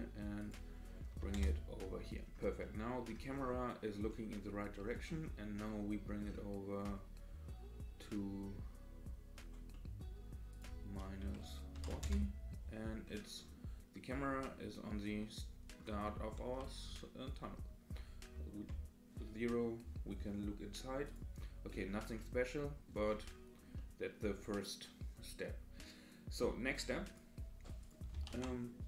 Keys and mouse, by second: 0.6-1.8 drag, 2.6-3.1 middle drag, 4.1-5.1 middle drag, 5.5-6.2 middle drag, 9.7 middle click, 10.6-12.6 drag, 14.4-15.8 middle drag, 16.0-16.5 shift+middle drag, 17.4-17.9 middle drag, 18.5 KP_0, 21.1 click, 22.2-22.8 middle drag, 23.8-25.8 middle drag, 27.1-28.0 drag, 28.3 shift+a.